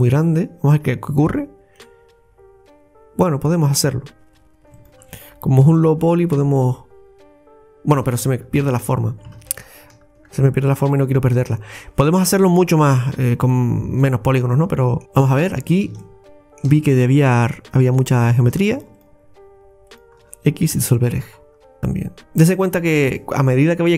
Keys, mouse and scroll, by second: 1.3 x, 4.8 alt+shift+right click, 5.7 x, 6.4 scroll down 2, 6.6-8.6 middle drag, 8.6 ctrl+z, 9.4 ctrl+z, 9.9 ctrl+z, 10.7-11.0 scroll down 1, 11.0-12.8 middle drag, 12.9-13.3 scroll up 3, 13.5-15.5 middle drag, 15.5-16.0 scroll up 3, 16.1-18.2 middle drag, 18.2 right click, 18.8 alt+shift+right click, 19.0 alt+shift+right click, 19.9 alt+shift+right click, 20.8 x, 21.3-21.7 scroll down 3, 21.8 middle click.